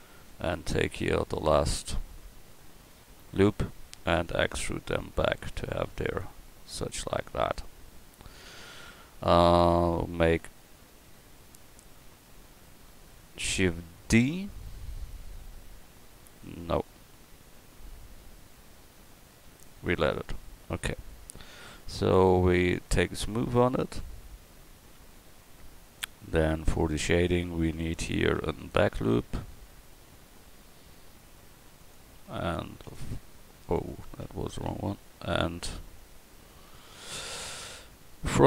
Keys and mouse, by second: 0.0 Tab, 0.5 click, 4.2 e, 20.4 Tab, 23.7-25.3 drag, 25.9 middle click, 26.9 Tab, 28.2 ctrl+r, 32.6 ctrl+r, 34.7 ctrl+z, 36.4 ctrl+r.